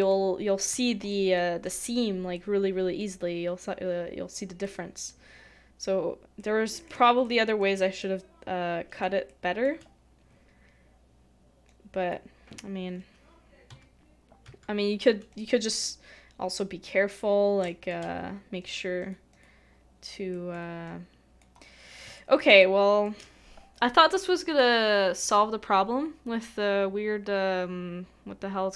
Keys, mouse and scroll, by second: 1.1 shift+middle click, 7.2 shift+middle click, 8.0 middle click, 9.3 shift+middle click, 17.6 typing, 17.6 shift+middle click, 19.0 double click, 19.7-20.3 scroll up 1, 20.3 middle click, 22.1 shift+middle click, 22.6 shift+middle click.